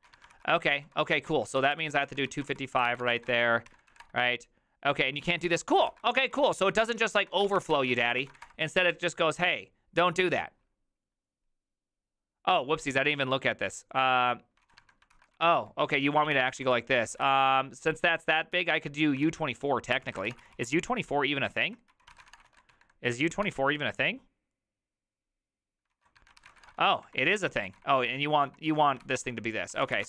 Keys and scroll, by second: 0.0-3.7 typing, 3.9 Up, 4.0 Return, 5.5 ctrl+a, 5.7-8.1 typing, 5.9 ctrl+c, 8.2 ctrl+c, 8.4 Up, 8.5 Return, 14.7 ctrl+a, 14.8-23.2 typing, 15.1 ctrl+c, 23.5 Return, 25.9 ctrl+a, 26.0-30.0 typing.